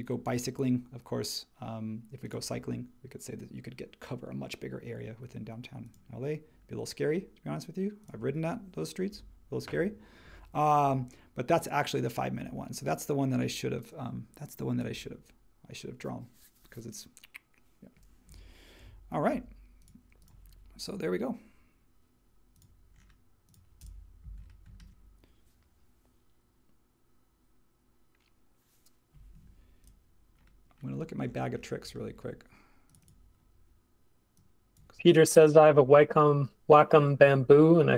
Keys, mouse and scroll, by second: 19.3 super+h.